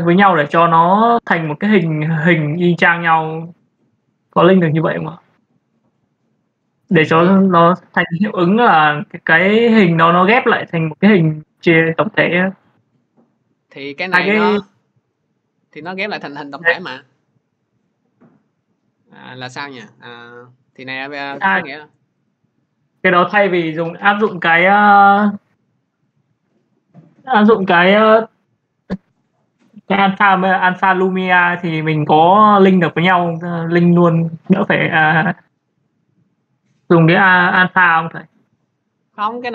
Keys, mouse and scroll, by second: 0.0 click, 10.0-15.1 drag, 15.7 right click, 20.2 click, 22.1 click, 25.4 click, 26.0 click, 39.3 click.